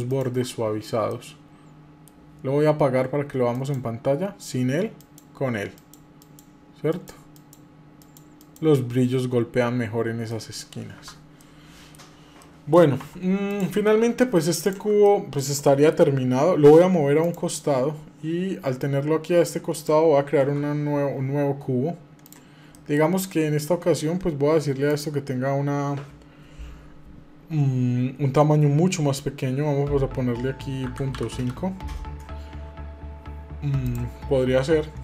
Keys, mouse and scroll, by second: 0.9 middle click, 3.3 click, 4.7 click, 5.5 click, 6.0 click, 6.7 click, 7.1 click, 7.8 click, 8.1 click, 9.5-10.2 scroll down 4, 10.1 middle click, 11.2 middle click, 12.2 middle click, 12.9 Tab, 13.3 click, 13.6 middle click, 14.4 click, 14.8 middle click, 15.2 scroll down 1, 15.4 shift+middle click, 17.0 click, 18.5 click, 19.5 click, 20.2 shift+a, 22.5 middle click, 24.7-32.1 drag, 33.6-34.9 drag.